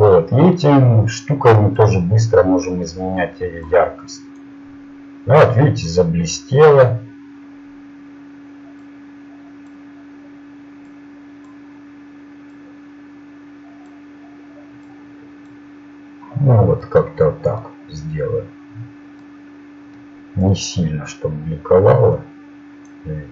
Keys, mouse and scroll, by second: 1.7-2.9 drag, 5.1-7.8 drag, 8.8-11.6 drag, 13.6 click, 15.7-18.1 drag, 22.1-23.3 drag.